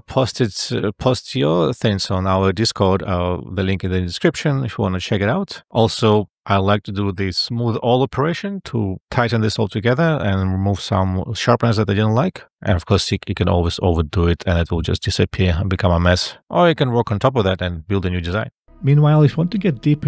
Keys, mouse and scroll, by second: 7.7 F12, 13.4 F12.